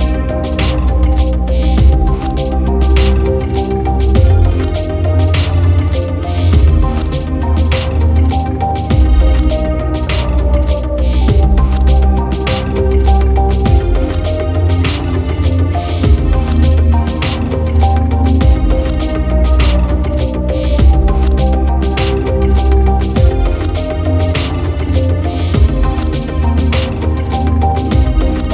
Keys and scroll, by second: 10.5 ctrl+t, 16.5 ctrl+j, 20.9 ctrl+t, 28.0 ctrl+t.